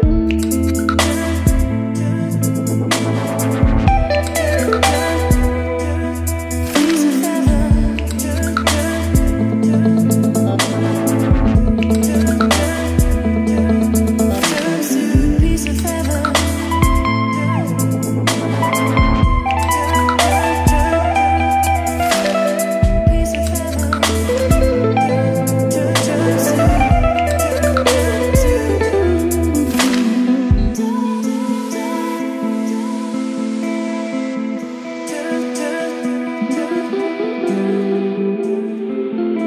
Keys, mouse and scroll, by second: 9.3 Return, 11.1-23.1 drag, 23.3 ctrl+s, 26.5-34.9 drag, 35.3 ctrl+c, 36.8-39.4 drag.